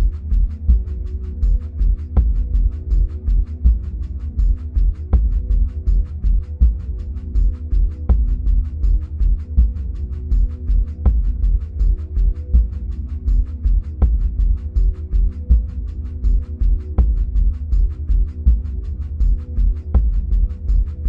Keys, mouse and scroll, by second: 2.7-4.3 middle drag, 4.3 click, 8.2-15.3 middle drag, 15.3 drag.